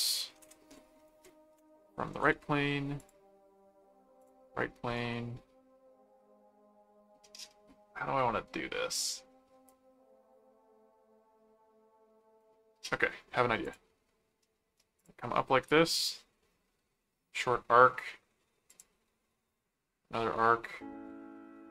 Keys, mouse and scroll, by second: 0.4 Return, 1.0 ctrl+1, 1.9 ctrl+4, 3.0 click, 4.2 click, 4.9 right click, 13.6 click, 15.0 click, 18.7 click.